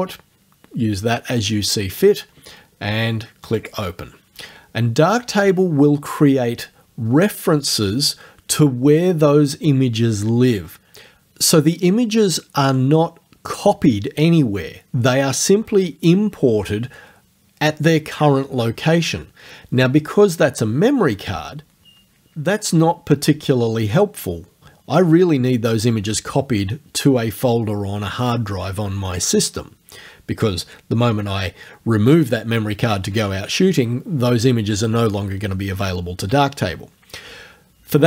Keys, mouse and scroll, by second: 3.6 click.